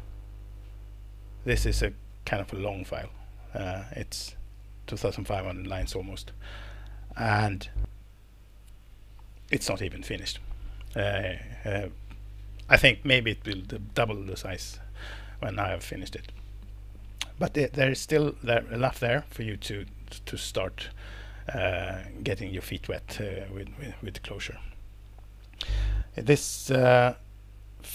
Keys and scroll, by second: 3.9 super+Page_Down, 7.2 super+Up, 22.2 Down, 22.3 Down, 22.5 Down, 22.6 Down, 22.8-27.9 Down.